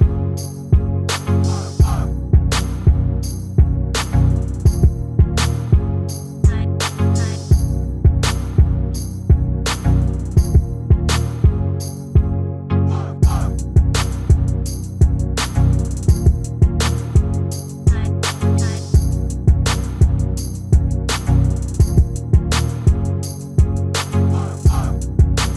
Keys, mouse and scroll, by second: 1.9-3.9 middle drag, 2.7-5.8 drag, 5.3-7.1 middle drag, 5.6 Tab, 6.6-9.3 drag, 9.4 click, 13.1-15.0 drag, 16.1-18.1 drag, 24.2 g.